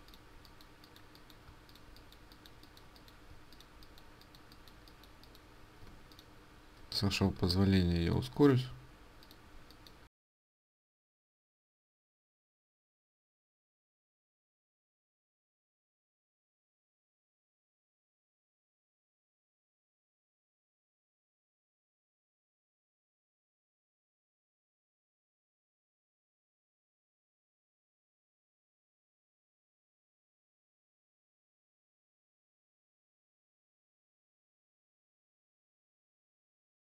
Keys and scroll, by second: 5.7 ctrl+space.